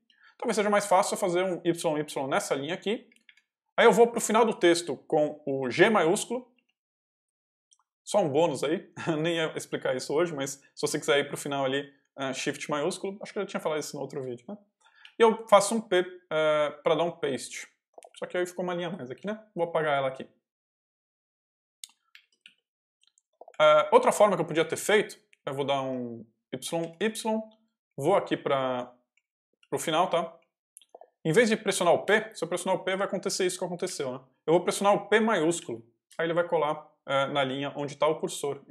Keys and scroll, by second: 0.5 k, 3.0 y, 6.4 shift+g, 14.9 p, 17.7 Escape, 18.0 k, 18.7 d, 21.9 y, 22.3 shift+p, 23.1 shift+Escape, 23.4 d, 24.7 k, 25.8 j, 26.7 y, 27.1 j, 28.1 o, 28.6 Escape, 29.0 k, 30.3 j, 31.9 p, 33.3 u, 34.6 shift+u.